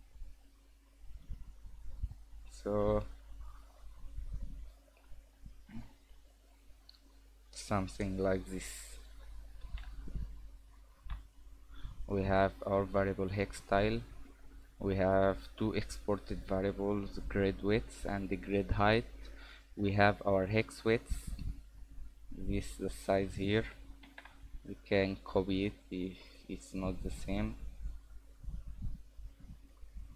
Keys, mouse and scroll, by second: 22.9 click.